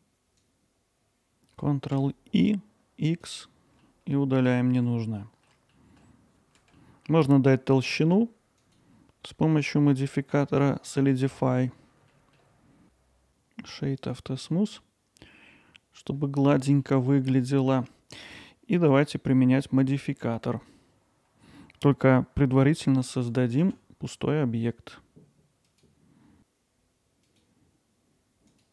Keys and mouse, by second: 1.4 alt+z, 1.4 ctrl+i, 3.8-4.8 alt+middle drag, 5.1-5.5 ctrl+alt+middle drag, 5.7 alt+middle click, 6.8 middle click, 8.7-11.4 drag, 12.5 click, 12.8 Tab, 12.8-14.1 right drag, 14.5-15.2 alt+middle drag, 16.4 middle drag, 16.8-17.3 alt+middle drag, 17.5-17.8 middle drag, 22.8 middle drag, 27.3-28.6 drag.